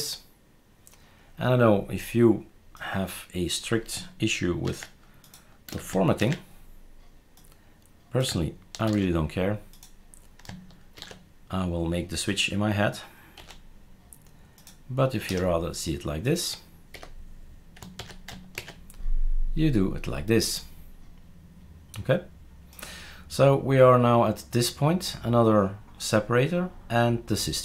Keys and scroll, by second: 4.6 ctrl+x, 5.7 space, 6.2 ctrl+v, 8.8 ctrl+x, 11.0 ctrl+v, 13.4 -, 15.3 BackSpace, 16.9 Delete, 18.0 ctrl+s, 18.5 shift+super+r.